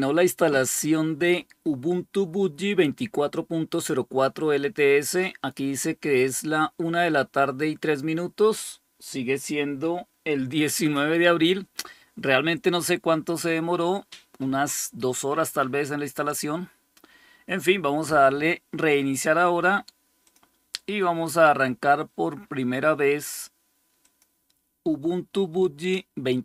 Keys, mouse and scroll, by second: 20.2 click, 23.9 click.